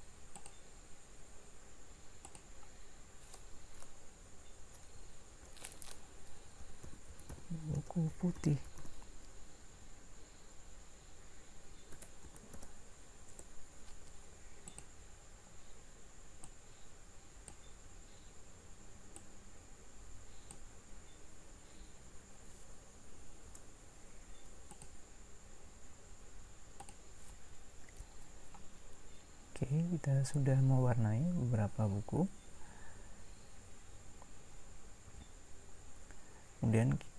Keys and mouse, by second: 14.7-16.4 drag, 26.9 click.